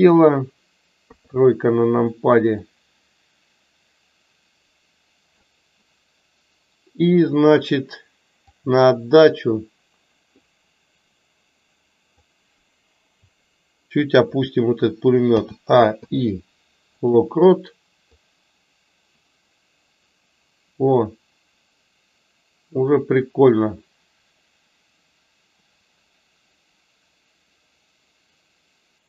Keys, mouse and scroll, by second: 2.5-5.4 drag, 8.5 click, 10.6-12.1 drag, 18.1-29.0 drag.